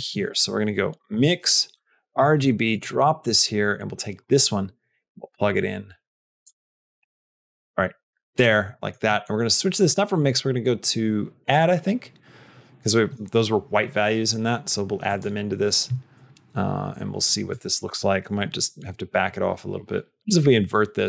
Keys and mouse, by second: 0.0 shift+a, 2.8 middle click, 6.2 click, 7.4 click, 8.6 middle click, 10.0-15.1 drag, 20.2 click.